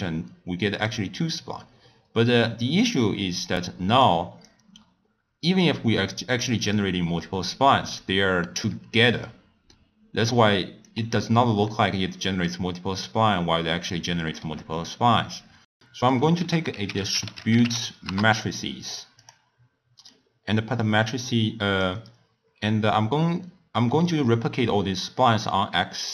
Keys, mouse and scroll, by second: 0.7 click, 4.0-8.6 drag, 10.2-11.7 drag, 11.7-12.7 middle drag, 13.9-15.5 middle drag, 15.8 middle click, 16.4 ctrl+a, 20.1-23.1 drag.